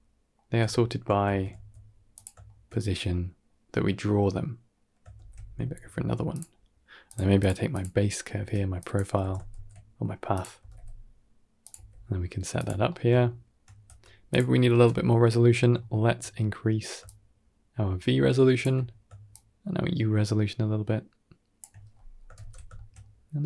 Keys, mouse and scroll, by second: 1.1 shift+d, 2.3 shift+middle click, 2.6 middle click, 4.1 middle click, 4.3 shift+middle click, 5.0 shift+d, 6.9 click, 7.3 click, 7.6 click, 8.0 middle click, 8.3 Tab, 8.7 click, 9.1 g, 10.5 r, 11.6 s, 12.7 middle click, 13.1 shift+middle click, 13.7 Tab, 14.2 click, 15.7 shift+middle click, 17.0-18.5 shift+middle drag, 19.2-21.4 shift+middle drag, 21.8-22.1 middle drag, 22.9-23.3 middle drag.